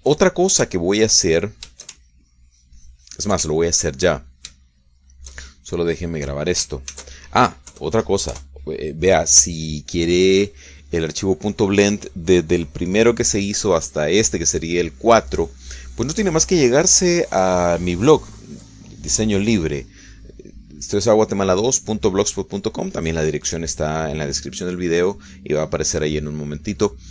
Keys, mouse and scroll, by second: 0.7 ctrl+shift+click, 1.3-2.5 ctrl+shift+middle drag, 2.7 ctrl+shift+middle click, 3.3-4.8 ctrl+shift+drag, 4.9 ctrl+shift+middle click, 5.3 ctrl+shift+middle click, 5.9-7.8 shift+middle drag, 8.3 ctrl+shift+s, 9.0 KP_Add, 9.8 KP_Enter, 11.4 middle click, 11.8 click.